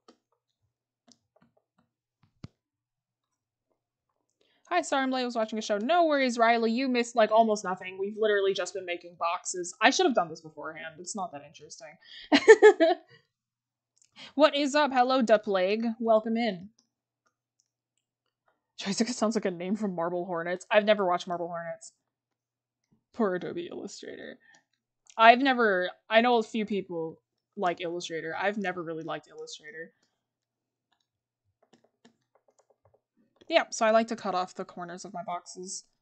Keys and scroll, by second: 5.6 scroll, 8.3 scroll, 21.7 scroll down 1, 25.0 scroll, 25.7-26.7 scroll up 1, 27.5 scroll, 29.8 scroll.